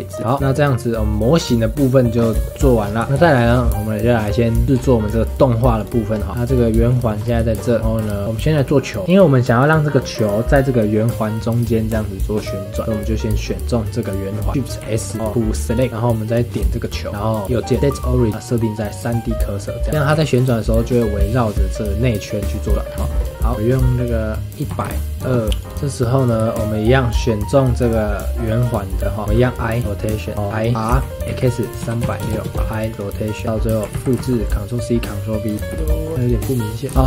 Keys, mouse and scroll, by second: 0.2 scroll up 5, 0.3 click, 0.4 scroll down 5, 0.4-2.1 shift+middle drag, 2.1 scroll up 2, 2.4-2.8 shift+middle drag, 2.8 scroll up 3, 3.0 scroll down 4, 3.2-4.7 shift+middle drag, 4.7-5.4 scroll up 6, 5.4 middle click, 5.7 click, 6.1 scroll down 2, 6.3 middle click, 6.4 click, 6.8-7.2 shift+middle drag, 7.2 scroll up 2, 7.5 shift+middle click, 8.2 click, 9.0 click, 10.1 click, 13.3 click, 14.8 shift+s, 15.9-16.8 middle drag, 16.8 click, 17.1 middle click, 17.4-19.2 right drag, 19.8 scroll down 2, 19.9 click, 20.0 r, 22.7 middle click, 22.9 scroll up 1, 23.1 shift+middle click, 23.5-25.7 drag, 26.5-29.2 shift+middle drag, 29.9 i, 30.3 click, 30.9 r, 32.5 i, 33.4-33.9 drag, 33.9 ctrl+c, 34.1 ctrl+v, 35.4 click, 35.5 space, 35.7 shift+middle click, 36.2 click, 36.8 space, 36.9 middle click.